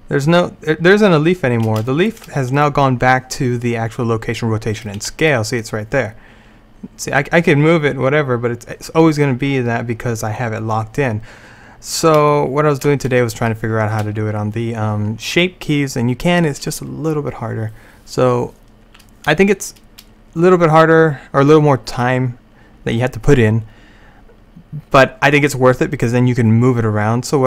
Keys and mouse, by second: 0.5-2.1 middle drag, 2.6-5.0 right drag, 5.0 g, 9.3-11.6 drag, 12.4 middle click.